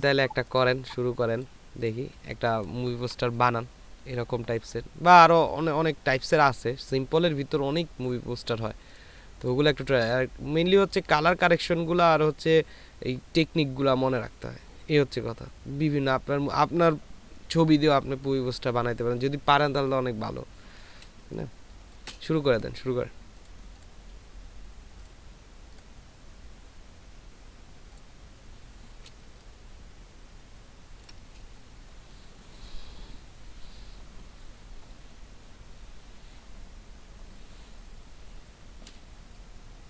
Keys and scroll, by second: 21.6 ctrl+space, 23.8 ctrl+space, 29.6 ctrl+space.